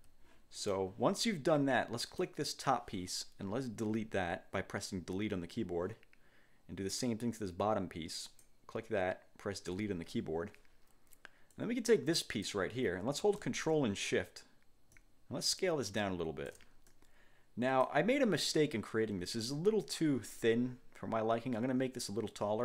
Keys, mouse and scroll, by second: 0.7 click, 2.1 click, 4.0 Delete, 8.4 click, 9.9 Delete, 11.7 click, 15.1-16.8 ctrl+shift+drag, 17.0 ctrl+shift+click.